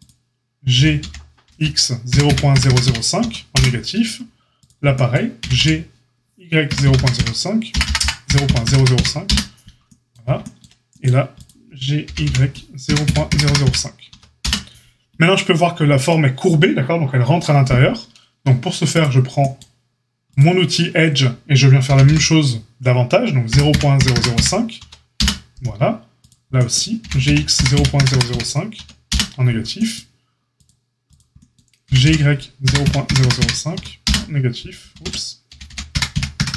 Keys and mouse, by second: 0.7 g, 4.5 click, 5.3 g, 11.3 click, 11.4-18.9 middle drag, 12.0 g, 18.9-20.3 drag, 20.3-30.6 middle drag, 21.8 g, 26.9 g, 30.6-31.8 drag, 31.8-36.5 middle drag, 31.8 g, 35.0 ctrl+z, 35.4 g.